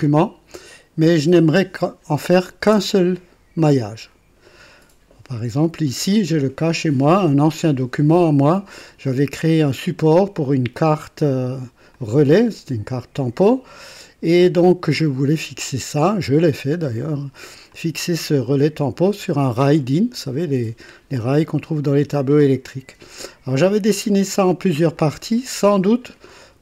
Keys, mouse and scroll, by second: 10.7 click, 11.9 click, 14.9-17.3 drag, 17.7 click, 19.0-20.0 drag, 20.4 click, 21.1-22.3 drag, 22.5 click, 24.1 click, 24.9 click.